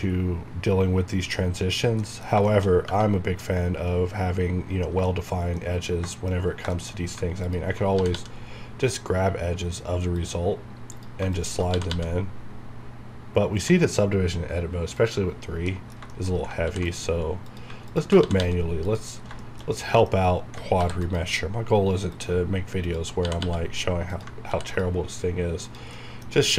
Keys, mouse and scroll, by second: 0.0-1.4 shift+scroll up 2, 1.4 scroll down 1, 2.0 middle click, 2.5 shift+scroll down 1, 2.7 scroll up 1, 4.7 scroll down 1, 5.2 shift+middle click, 6.4 scroll up 1, 6.8 shift+middle click, 7.0 shift+scroll up 1, 15.5 scroll down 1, 15.7 middle click, 16.3 scroll up 1, 16.7 ctrl+r, 16.9 click, 18.2 alt+g, 18.9 click, 19.1 scroll down 1, 19.4 shift+middle click, 20.1 scroll up 1, 20.8 ctrl+r, 21.0 click, 22.3 click, 23.2 typing, 24.1 click, 24.5 ctrl+r, 24.7 ctrl+click, 26.0 middle click.